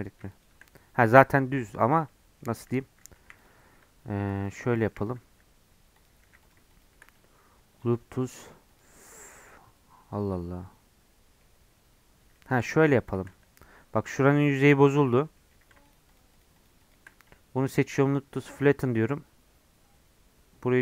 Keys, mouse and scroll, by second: 0.0-1.3 drag, 1.3-3.2 middle drag, 3.2 1, 3.4 click, 4.2 ctrl+r, 4.9 1, 5.0 click, 5.2 g, 6.2 2, 6.4 shift+click, 7.1-9.6 right drag, 9.6-12.6 middle drag, 12.6 3, 12.9 click, 13.3-15.9 middle drag, 15.9-17.2 shift+drag, 17.2-19.2 right drag, 19.2-20.8 middle drag.